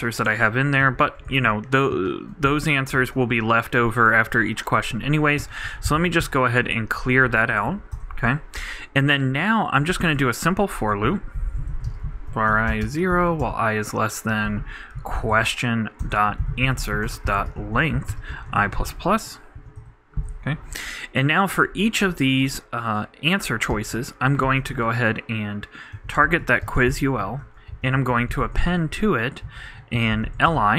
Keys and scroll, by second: 0.0-0.2 typing, 2.9 super+l, 3.0 super+Right, 5.8-7.1 typing, 10.9 shift+Tab, 11.0 shift+9, 11.3 shift+v, 13.3 shift+\, 13.4 shift+,, 14.3 shift+q, 18.5 shift+\, 18.5 shift+=, 19.0 shift+Right, 19.5 shift+[, 19.8 shift+Return, 24.0-25.2 typing, 27.2 super+l, 27.3 super+Right, 27.7 super+., 28.3-30.7 typing.